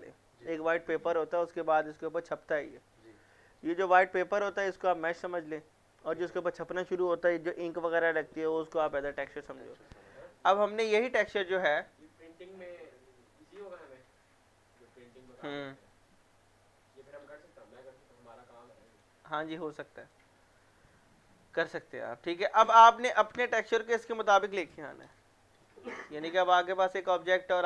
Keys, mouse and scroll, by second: 11.4-14.4 drag, 17.1-22.5 drag, 27.2 click.